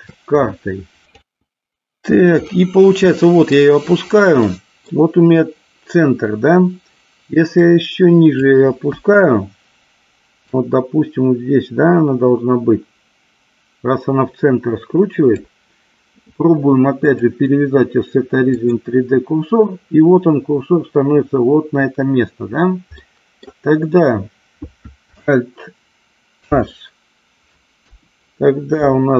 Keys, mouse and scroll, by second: 2.8-3.8 middle drag, 4.7-5.2 middle drag, 7.8 click, 9.1 KP_1, 10.8-15.7 drag, 17.3-19.1 drag, 23.3 middle click, 26.7 alt+h, 28.1 KP_1.